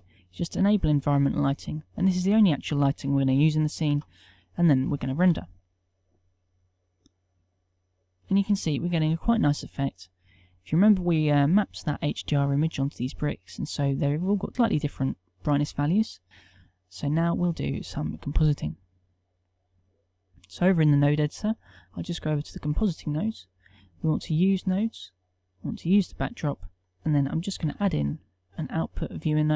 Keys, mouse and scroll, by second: 5.8 F12.